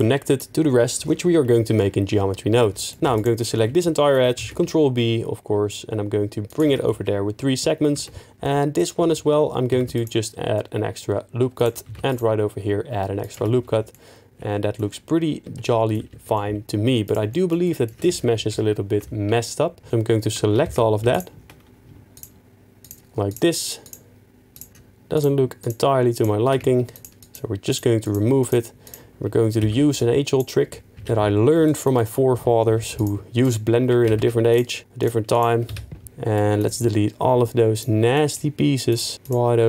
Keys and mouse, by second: 2.9 middle click, 3.0 2, 4.4 ctrl+b, 6.5 shift+click, 6.6 Tab, 7.9 Tab, 8.4 click, 9.7 ctrl+r, 9.9 click, 11.5 click, 11.8 ctrl+r, 13.2 click, 13.3 Tab, 13.9 middle click, 14.4 middle click, 15.4 Tab, 15.6 middle click, 16.1 3, 16.3 middle click, 17.6 click, 18.6 ctrl+KP_7, 20.6 ctrl+z, 21.1 ctrl+click, 23.8 ctrl+click, 24.5 ctrl+click, 25.6 ctrl+click, 26.9 shift+click, 27.2 shift+click, 28.0 shift+click, 28.4 shift+click, 29.6 x, 30.7 middle click, 31.5 2, 31.9 middle click, 32.7 3, 32.9 click, 33.4 shift+click, 34.1 ctrl+z, 34.5 shift+click, 35.7 x, 38.1 shift+middle click.